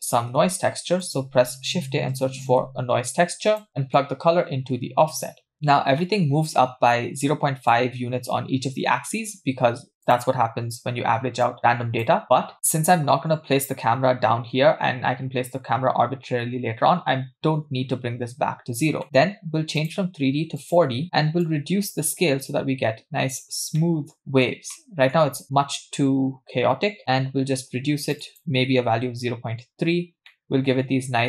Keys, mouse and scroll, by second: 0.4 shift+a, 4.0-5.3 drag, 6.0-7.8 middle drag, 10.0 click, 11.4-12.1 drag, 12.8-14.8 scroll down 2, 14.8-16.0 scroll down 1, 18.6-19.0 scroll down 2, 19.0 middle click, 19.8-20.8 drag, 21.5-23.4 drag, 23.8 middle click, 24.2 middle click, 24.2-24.5 scroll up 2, 24.7-25.1 shift+middle drag, 25.4-29.1 shift+drag, 30.3-31.2 middle drag.